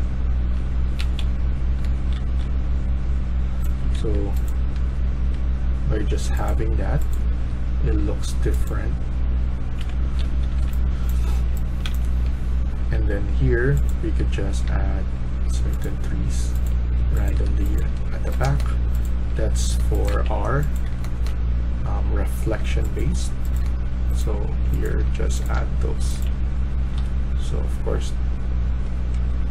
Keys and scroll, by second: 0.0-2.7 typing, 3.9 Escape, 4.6 Escape, 7.2 Escape, 8.2 Escape, 9.7 Delete, 10.2-14.6 typing, 16.5-19.3 typing, 20.4-27.4 typing.